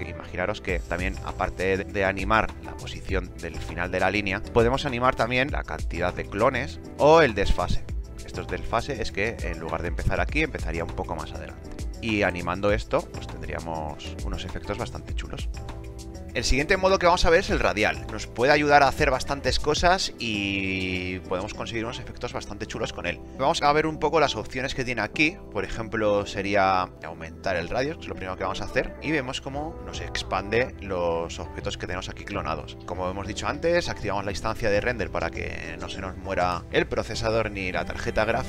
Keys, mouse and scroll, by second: 13.7 alt+right drag, 14.1-14.8 right drag.